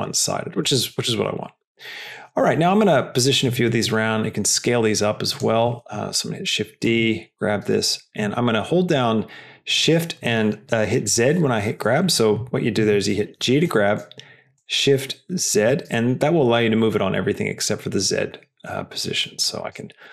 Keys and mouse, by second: 0.9 g, 3.8 s, 5.8 shift+d, 7.6 g, 13.8 g.